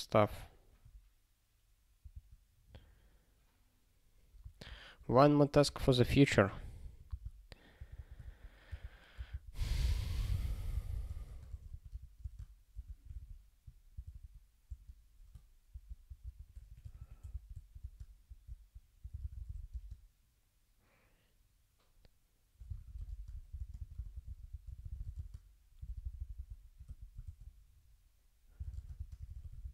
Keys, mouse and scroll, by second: 2.2 ctrl+g, 6.5 click, 6.8 ctrl+p, 7.1 Return, 7.7 -, 8.0 -, 8.2 ctrl+a, 8.7 ctrl+d, 9.2 ctrl+d, 9.3 ctrl+e, 9.7-13.6 typing, 14.2 ctrl+s, 14.6-20.1 typing, 22.5-25.5 typing, 25.8 alt+b, 26.0 alt+b, 26.2 alt+b, 26.3 alt+b, 26.8 p, 27.2 ctrl+e, 28.3-29.7 typing.